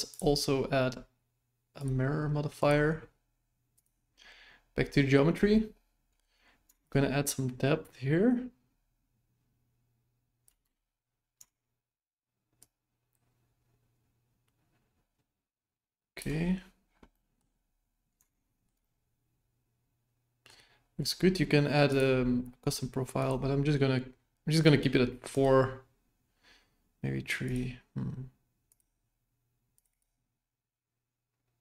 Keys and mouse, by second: 0.1-1.8 drag, 2.5 click, 3.7 click, 6.9-10.5 shift+drag, 10.6 KP_1, 12.7-16.2 shift+drag, 17.1 middle drag, 18.3-18.7 shift+middle drag, 18.8-20.5 middle drag, 21.9 click, 23.1 click, 25.3 click, 27.4 click, 28.7 click, 29.7 click, 29.9 click.